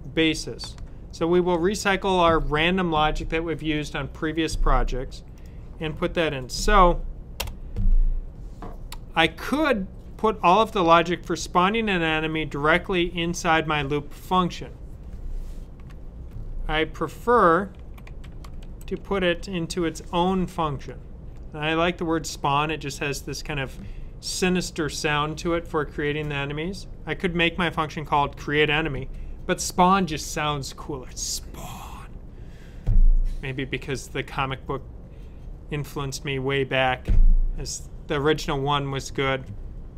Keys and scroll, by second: 16.2 typing, 18.1-19.3 typing.